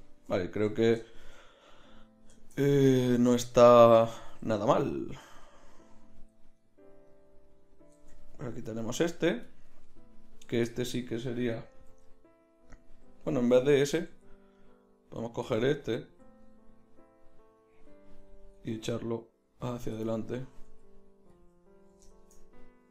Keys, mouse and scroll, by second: 3.6 z, 5.1 z, 6.2 z, 7.9 Tab, 8.5 z, 9.1 right click, 9.9 middle click, 12.1 g, 13.3 Tab, 14.1 z, 15.5 Tab, 16.1 z, 18.6 g, 20.7 g, 21.8 middle click.